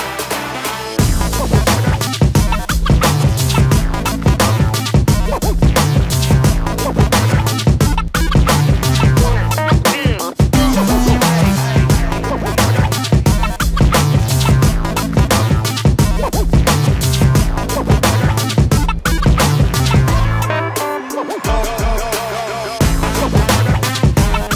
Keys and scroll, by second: 0.5 space, 2.3 p, 6.3 ctrl+space, 6.5 Escape, 11.2 shift+space, 11.5 Escape, 13.3 shift+a, 14.0 shift+z, 24.3 m.